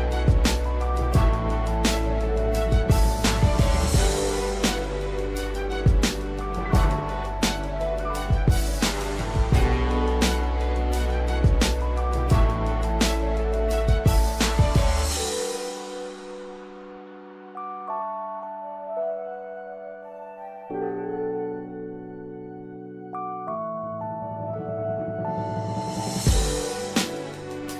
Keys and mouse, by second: 0.6 shift+middle click, 1.8-4.9 drag, 5.5 click, 6.2-10.7 drag, 16.8 shift+middle click, 17.7-20.4 drag, 20.6 shift+middle click, 21.7-23.8 drag, 24.2 shift+middle click, 25.5-26.8 drag, 27.3 shift+middle click.